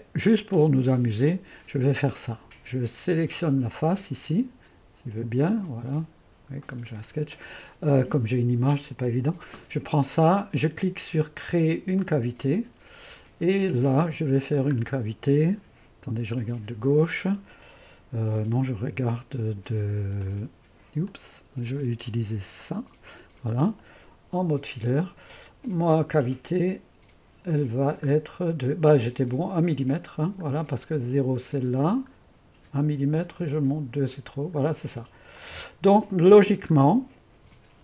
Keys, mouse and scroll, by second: 0.0-2.1 drag, 4.1-7.7 drag, 12.1-13.6 drag, 13.6-16.4 scroll down 2, 16.4 click, 20.3-21.8 drag, 22.7 click, 24.6 2, 28.3-29.4 scroll down 1, 29.4-30.6 scroll down 1, 30.6-31.2 scroll down 1, 31.2-34.3 scroll down 1, 34.3-35.4 scroll down 1, 35.4 click, 35.6 typing, 36.8-37.6 scroll down 1, 37.6-37.8 typing.